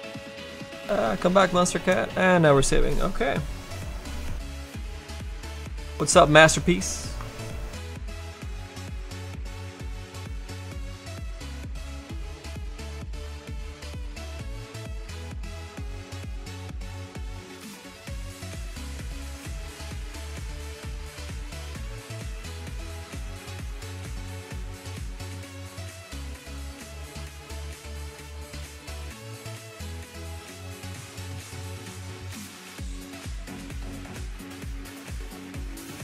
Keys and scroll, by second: 15.3 s, 21.5 s.